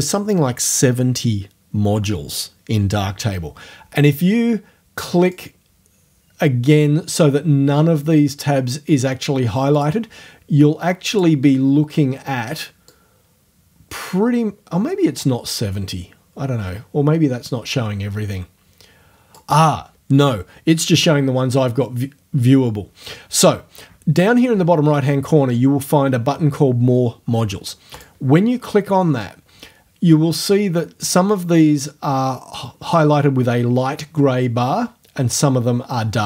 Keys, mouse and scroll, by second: 5.3 click, 9.7 click, 11.1 click, 12.9-19.5 drag, 19.5 middle click, 28.0 click.